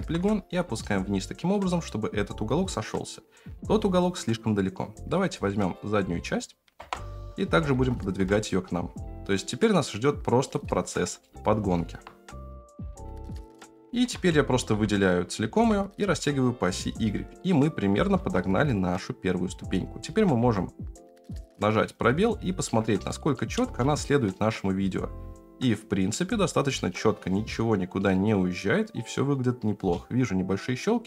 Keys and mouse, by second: 0.0 g, 4.6 middle click, 5.4 middle click, 6.8 KP_0, 7.5 g, 11.2 shift+middle click, 13.0 F9, 14.1 a, 14.5 s, 17.9 g, 20.0 s, 22.6 Tab, 23.7 space, 29.8 space.